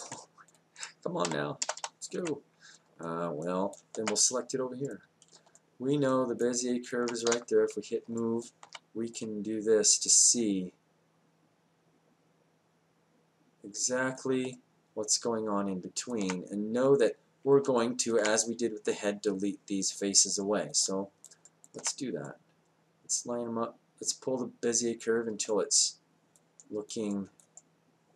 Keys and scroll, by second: 7.3 w.